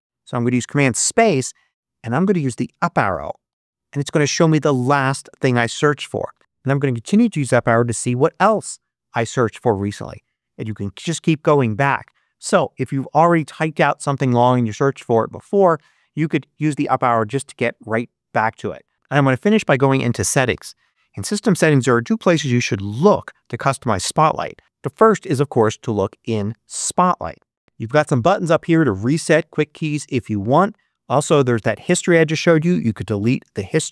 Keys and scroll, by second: 0.6 super+space, 3.4 Up, 8.5 Up, 9.9 Up.